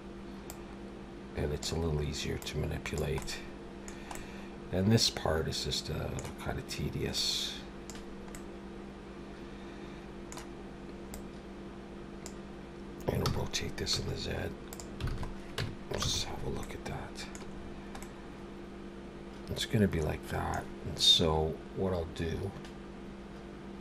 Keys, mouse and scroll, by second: 0.5 click, 2.4 click, 3.2 middle click, 4.1 middle click, 7.2 click, 8.3 middle click, 11.1 click, 13.2 r, 15.1 alt+a, 15.2 scroll down 1, 15.6 Tab, 16.0 alt+a, 16.2-16.8 scroll down 4, 16.6 middle click, 17.5 scroll down 2, 18.0 middle click.